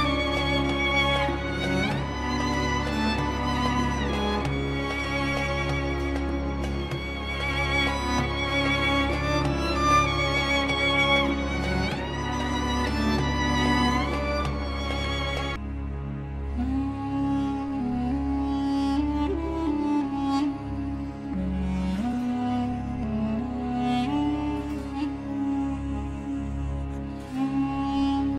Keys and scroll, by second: 1.3 F4, 3.5 Delete, 8.0 F2, 9.1 shift+Page_Up, 12.2 Escape, 23.6 F4, 24.4 F3, 24.7 Escape, 26.8 shift+F2.